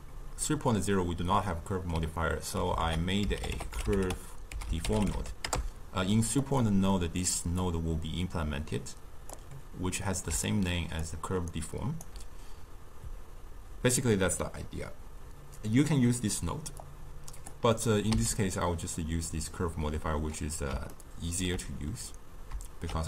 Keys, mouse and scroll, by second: 1.5-2.8 middle drag, 2.8 ctrl+a, 6.9 middle click, 7.7-10.3 drag, 10.3 d, 10.5-11.0 drag, 11.0-11.4 d, 11.5-12.1 right drag, 12.1 d, 12.7 d, 16.8-18.2 drag, 18.2 x, 20.9-22.9 ctrl+middle drag, 22.9 shift+a.